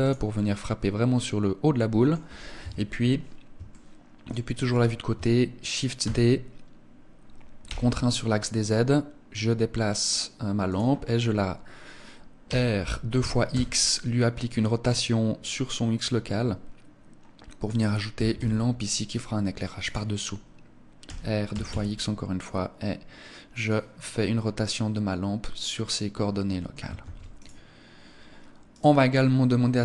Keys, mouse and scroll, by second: 0.2 middle click, 2.5 KP_3, 3.5 shift+middle click, 5.9 shift+d, 10.6 click, 12.3 r, 17.7 click, 18.0 g, 19.7 click, 20.9 r, 23.5 click, 23.9 middle click, 26.9 ctrl+s, 28.5 right click.